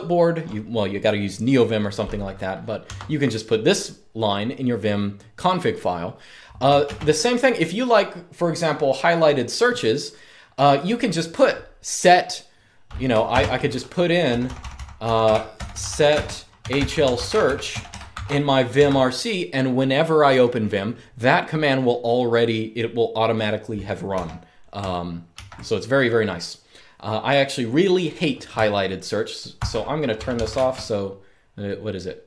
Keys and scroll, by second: 2.7 Escape, 6.6 super+space, 13.0 super+space, 13.7-18.6 typing, 23.8 u, 25.0 super+q, 29.2-30.7 typing, 32.1-32.2 typing.